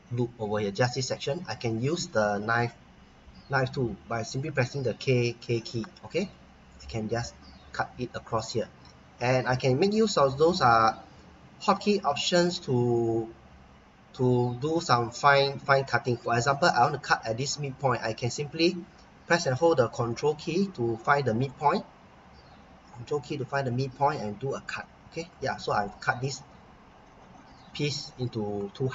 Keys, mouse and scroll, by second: 1.5-2.3 scroll up 1, 4.6 k, 21.4 click, 23.5 click, 24.5 Return, 25.3-25.9 scroll down 1, 25.9 middle click, 26.6-27.9 scroll up 1.